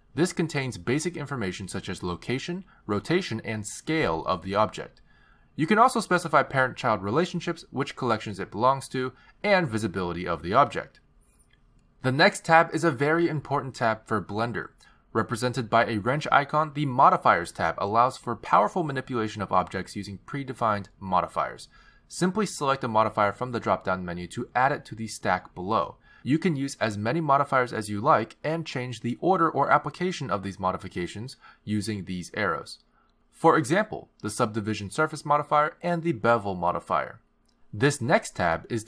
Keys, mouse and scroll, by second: 6.6-7.4 scroll down 2, 7.4 click, 8.3-9.6 scroll down 7, 9.3 click, 10.4 click, 10.6-11.1 scroll down 3, 12.6 click, 17.9 click, 26.3 click, 29.4 click, 30.6 click, 31.4 click, 34.7 click, 35.4 click, 36.5 click, 36.9 click, 38.4 click.